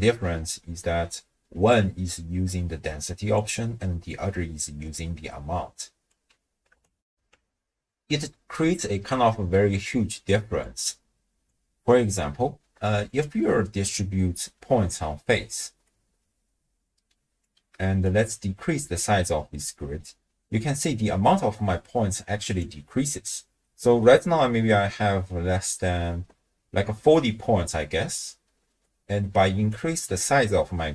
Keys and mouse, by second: 1.0 d, 1.5 d, 1.6-4.0 d, 1.7-3.4 drag, 4.1-6.1 drag, 6.1 d, 6.2 d, 6.3 d, 7.1 ctrl+alt+shift+w, 7.3 ctrl+alt+shift+q, 10.6-11.6 drag, 13.1 alt+shift+click, 14.7-15.8 d, 15.9-17.4 drag, 17.4 d, 17.6 d, 18.0-20.8 drag, 22.5 click, 23.6-24.0 middle drag, 29.7-30.9 drag.